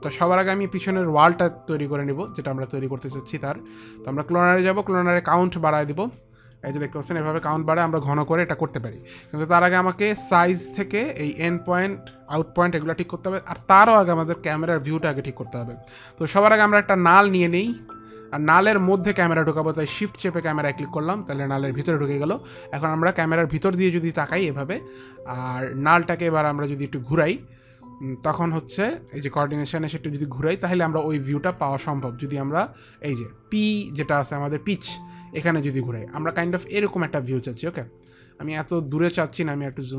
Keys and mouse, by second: 6.0 click, 6.2 click, 6.4 click, 17.3 click, 19.3 click, 23.8 click, 26.2 click, 29.4 click, 30.6 click, 31.8 ctrl+z, 32.5 click, 34.9 ctrl+z.